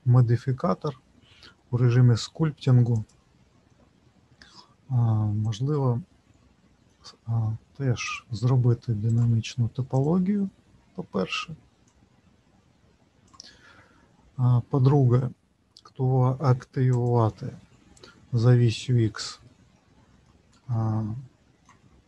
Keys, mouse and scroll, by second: 3.0 click, 4.0-5.4 scroll down 3, 5.4 click, 5.4-6.0 scroll down 1, 8.0 click, 17.0 click, 19.4 middle click, 20.7 shift+middle click.